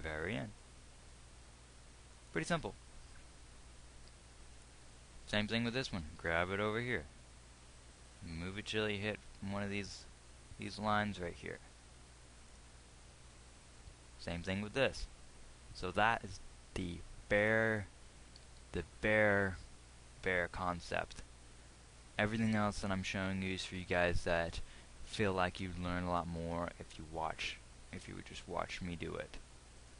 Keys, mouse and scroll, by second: 6.1 g, 14.4 g, 18.9 g.